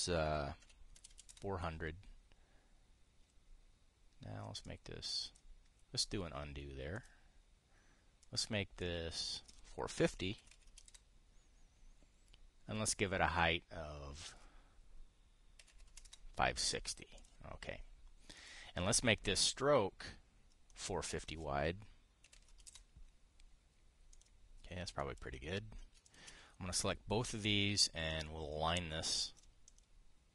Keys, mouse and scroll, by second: 1.3 KP_4, 1.7 KP_0, 5.3 click, 7.7 click, 9.5 click, 11.1 KP_4, 11.2 KP_5, 11.4 KP_0, 11.6 Return, 14.1 click, 16.3 KP_5, 16.4 KP_6, 16.6 KP_0, 16.7 Return, 17.9 click, 19.1 click, 21.4 click, 22.9 KP_4, 23.0 KP_5, 23.2 KP_0, 24.8 click, 25.7 click, 28.0 click, 28.8 click, 29.7 click.